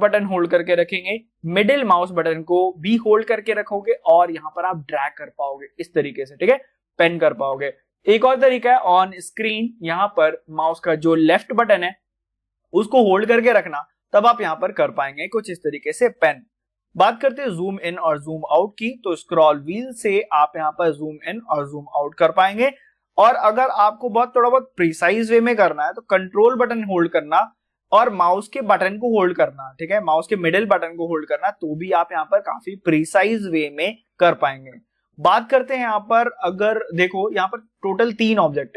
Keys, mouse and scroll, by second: 1.9-9.7 shift+middle drag, 11.7-19.2 drag, 19.2 scroll up 1, 19.7 scroll down 1, 20.2 scroll up 1, 21.0 scroll down 1, 21.7-22.0 scroll up 1, 25.9-26.6 scroll up 1, 26.6-27.2 ctrl+scroll up 1, 27.2-27.6 ctrl+scroll down 1, 27.6 ctrl+middle click, 27.9-35.9 ctrl+middle drag, 35.9 scroll down 1, 36.4 middle click, 37.9-38.6 scroll down 1, 38.6 click.